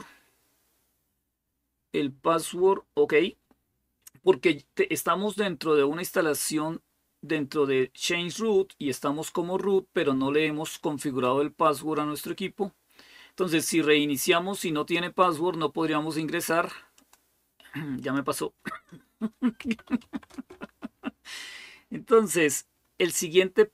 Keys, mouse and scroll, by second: 16.7 click, 17.8 click, 19.2-20.4 typing.